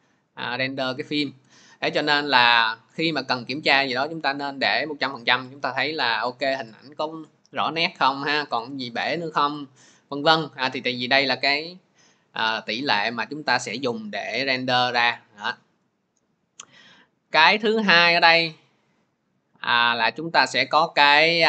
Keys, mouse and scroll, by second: 4.1 middle click, 6.3 scroll, 7.1-7.5 scroll, 8.2 scroll, 9.2-9.7 scroll, 10.3 scroll, 15.0 scroll, 20.7 scroll.